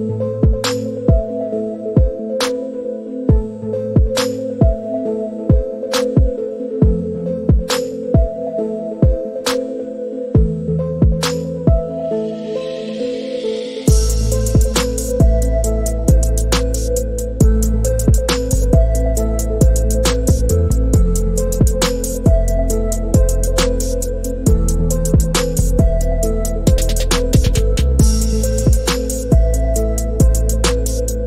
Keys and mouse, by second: 1.7 click, 2.2-3.0 shift+middle drag, 3.4 click, 5.3 click, 7.4-10.6 drag, 11.5 shift+middle click, 12.5 shift+middle click, 14.4 click, 16.7 click, 17.3 click, 18.7-20.7 drag, 23.1-23.7 shift+middle drag, 24.7-25.2 drag, 27.4-28.4 drag, 29.3 shift+middle drag, 30.0-30.8 shift+drag.